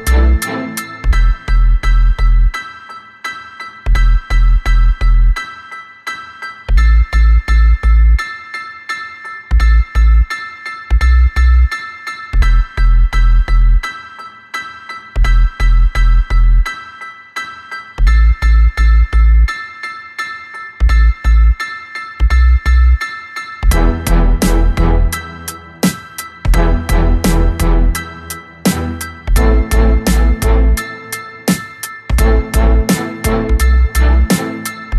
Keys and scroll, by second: 1.1 2, 3.9 b, 5.1 Escape, 5.4 3, 6.1 k, 6.4 l, 7.5 b, 12.3 Escape, 15.4 ctrl+c, 17.4 b, 21.1 b, 23.5 Escape, 26.1 ctrl+v, 27.8 r, 29.7 b, 34.3 2.